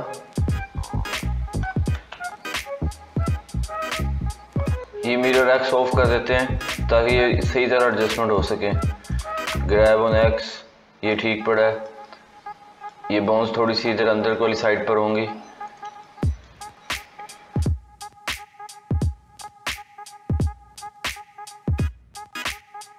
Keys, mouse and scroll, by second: 1.5 g, 5.5 click, 6.5 g, 8.3 click, 9.0 g, 11.0-15.5 middle drag, 15.5 click, 15.9-17.6 shift+middle drag, 17.6 g, 19.7 click, 20.5 g, 22.7 click.